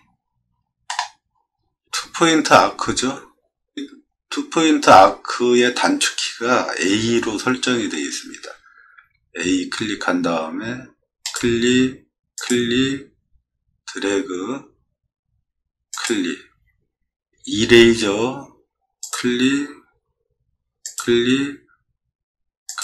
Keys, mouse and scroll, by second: 0.5 middle click, 0.8 middle click, 1.1 middle click, 1.5 middle click, 9.0 a, 17.8 e.